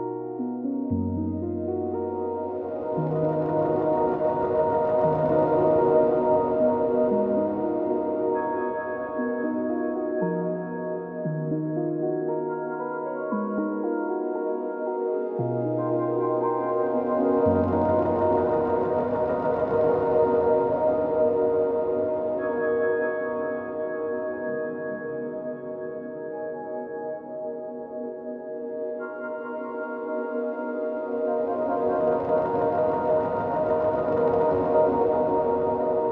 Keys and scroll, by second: 9.2 ctrl+d.